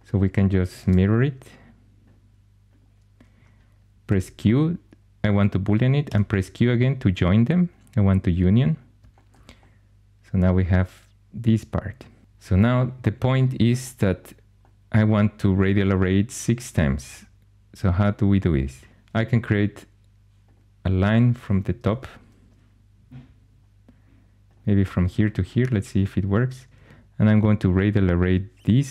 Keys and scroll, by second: 0.7 alt+x, 3.9 q, 5.9 q, 21.7 shift+a.